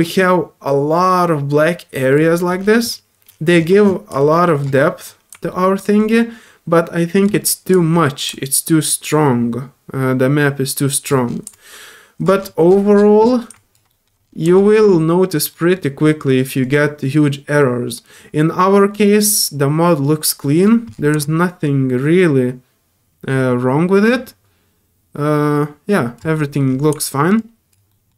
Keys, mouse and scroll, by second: 2.3 alt+middle click, 2.6 scroll up 1, 3.5-3.8 scroll up 2, 4.2 alt+click, 4.8 alt+middle click, 6.0-7.2 alt+drag, 7.4 alt+middle click, 8.3-11.0 alt+drag, 11.5-12.2 alt+drag, 13.2 middle click, 13.5 alt+click, 13.9 middle click, 14.5 alt+click, 14.9 middle click, 15.5 middle click, 16.0 middle click, 16.6-20.2 drag, 20.4 middle click, 21.2-26.1 alt+drag, 26.3 middle click, 26.6 scroll up 1, 27.3 click, 27.9 middle click.